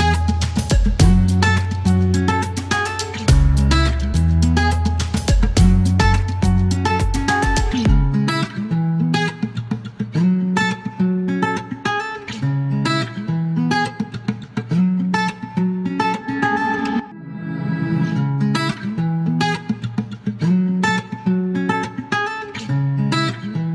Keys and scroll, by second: 1.7 space, 2.8 space, 8.3 alt+e, 14.1 typing, 16.4 KP_1, 16.5 KP_5, 16.6 Return, 17.1 alt+q, 20.9 alt+q, 22.1 e.